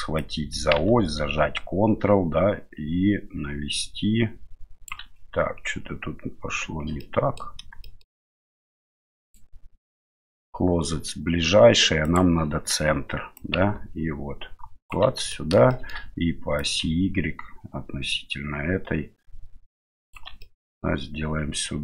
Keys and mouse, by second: 0.2-4.9 drag, 7.0-7.4 middle drag, 7.8 shift+middle drag, 8.2 middle click, 9.2-12.4 drag, 13.4-14.9 ctrl+drag, 15.3 middle drag, 15.7 shift+middle drag, 16.6-20.1 ctrl+drag, 20.4-20.8 middle drag.